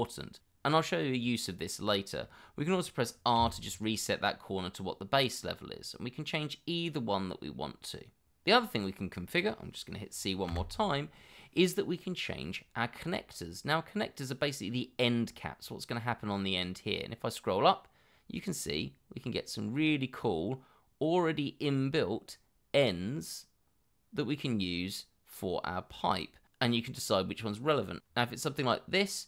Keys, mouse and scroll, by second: 3.4 r, 6.6 scroll down 1, 6.9-7.4 scroll up 1, 10.5 c, 17.0 scroll up 1, 22.3 middle click, 23.1-23.4 scroll up 1.